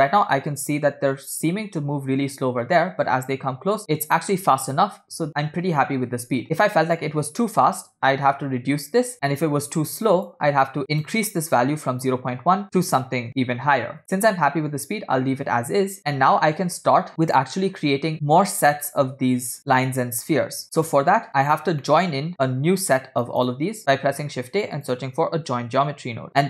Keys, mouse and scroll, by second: 2.8-3.1 scroll down 3, 5.2 space, 6.4-7.7 scroll up 5, 6.7 middle click, 7.8-9.1 drag, 10.2-14.0 drag, 15.4 scroll down 2, 18.1 click, 19.6-21.1 drag, 21.3 click, 21.3 middle click, 21.3 scroll down 1, 21.8 middle click, 22.9-23.4 drag, 24.0 shift+a.